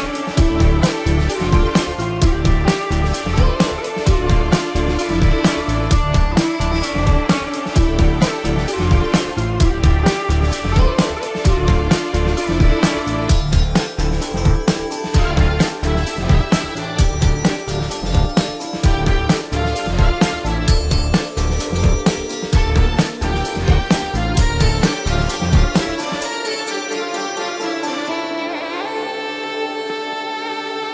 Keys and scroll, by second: 0.9 ctrl+-, 3.5 ctrl+=, 4.1 ctrl+=, 4.3 space, 5.8 ctrl+-, 6.1 space, 6.4 ctrl+-, 6.6 space, 8.1 ctrl+alt+z, 8.3 ], 10.3 space, 11.6 space, 12.5 ctrl+-, 13.2 ctrl+=, 13.8 space, 15.1-20.3 typing, 20.6 ctrl+-, 21.2 ctrl+-, 21.4 ], 22.0 space, 22.4 ], 23.1 ], 24.2 space, 27.0 ctrl+alt+z, 30.7 ctrl+alt+z.